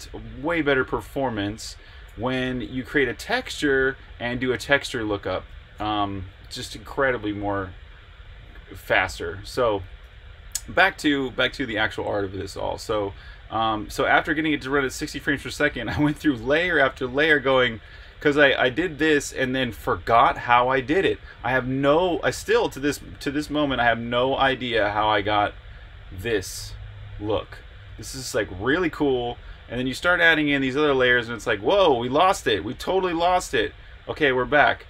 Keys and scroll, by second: 3.2 v, 5.5 Escape, 10.0 super+Tab.